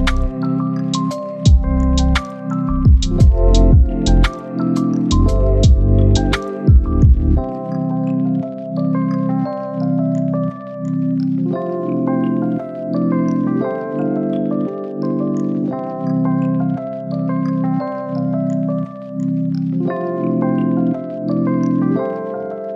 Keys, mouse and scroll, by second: 20.5 click, 20.9 right click, 21.6 click, 22.4 right click.